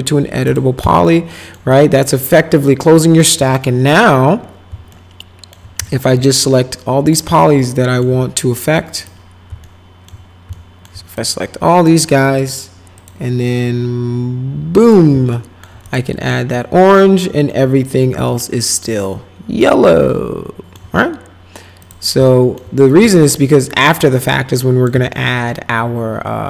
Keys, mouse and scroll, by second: 0.4 click, 1.0 alt+middle click, 1.7-3.2 alt+middle drag, 4.9 alt+middle click, 5.9 alt+middle click, 6.4 click, 7.4 alt+middle click, 8.9 click, 9.6 alt+middle click, 10.5 alt+middle click, 11.2 click, 13.0 click, 14.8 click, 15.3 alt+middle click, 15.8 click, 16.2-17.5 alt+right drag, 18.3-20.7 alt+middle drag, 21.8 click, 22.2 alt+middle click, 23.0 alt+middle click, 24.2 click, 25.1-26.4 alt+middle drag.